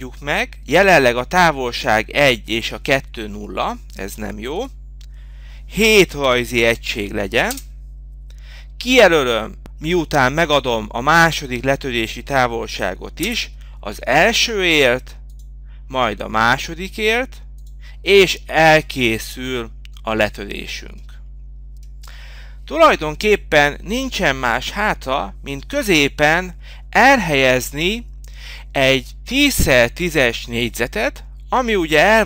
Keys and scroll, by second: 16.5 Return.